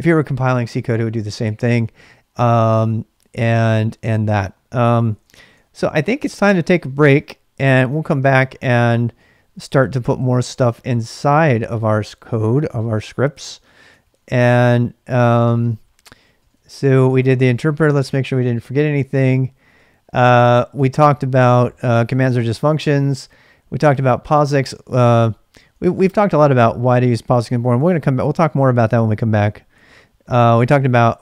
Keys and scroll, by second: 4.9-6.3 typing, 7.0 Return, 7.7-8.4 typing, 8.8 ctrl+[, 8.8 ctrl+j, 9.6 ctrl+[, 9.7 ctrl+j, 10.1 shift+z, 10.4 shift+z, 14.0 ctrl+a, 14.1 ctrl+a, 15.5-20.8 typing, 22.0-23.4 typing, 24.7-25.9 typing, 27.1-31.2 typing.